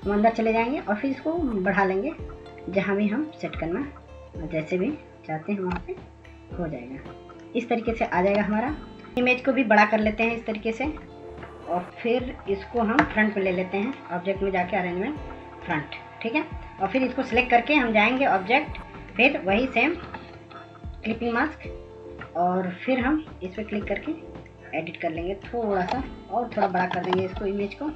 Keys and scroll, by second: 0.2 ctrl+s, 0.7 ctrl+s, 21.0 ctrl+s, 21.5 ctrl+s, 26.8 ctrl+-, 27.0 ctrl+-.